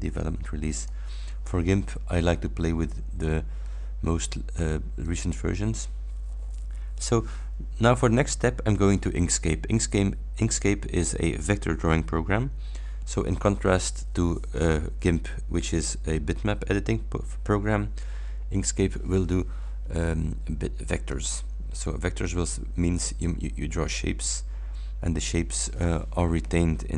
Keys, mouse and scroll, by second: 0.8 click, 5.1 click, 21.2 click.